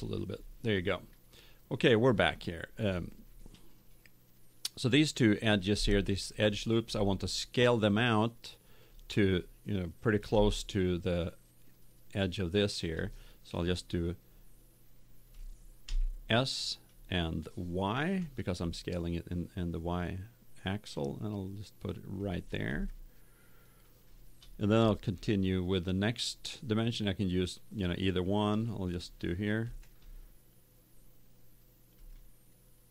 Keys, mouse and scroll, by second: 6.1-8.2 middle drag, 10.4-12.3 middle drag, 16.0 s, 22.2 click, 22.8 middle click, 23.5 click, 24.1 middle click, 29.6 ctrl+r.